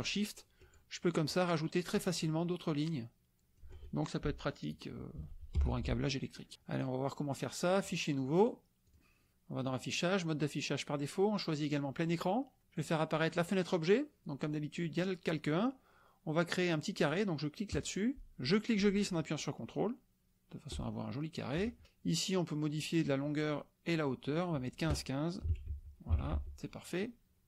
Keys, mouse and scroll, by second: 0.1-0.9 shift+drag, 1.2-2.0 shift+drag, 2.2-3.7 shift+drag, 5.5 F1, 6.0 click, 6.1 middle click, 6.9 click, 8.4-9.1 drag, 9.6-9.9 drag, 11.6 click, 12.8 click, 13.4 click, 17.7 click, 18.5-21.7 ctrl+drag, 22.7 click, 23.8 click, 24.6 click, 25.4 KP_1, 25.7 Tab, 26.1 KP_5, 26.3 Tab.